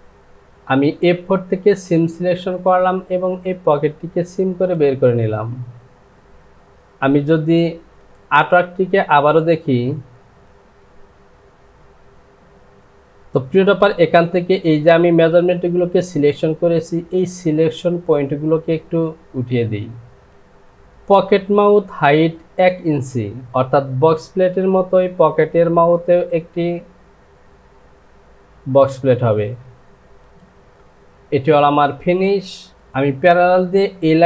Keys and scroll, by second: 20.3 ctrl+z, 30.7 Home.